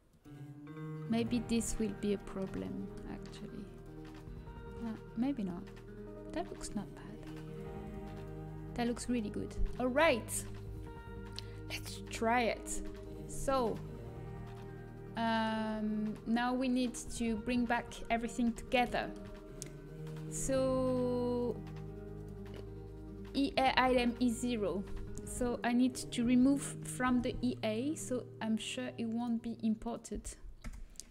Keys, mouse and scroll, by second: 1.7-2.7 right drag, 2.1-3.5 drag, 3.5 middle click, 4.0-5.5 drag, 4.0 right click, 5.5-11.0 middle drag, 12.7-16.4 middle drag, 17.0-18.0 drag, 18.2 click, 18.5-20.9 middle drag, 21.3-23.9 drag, 25.3-27.5 drag, 29.1-31.1 drag.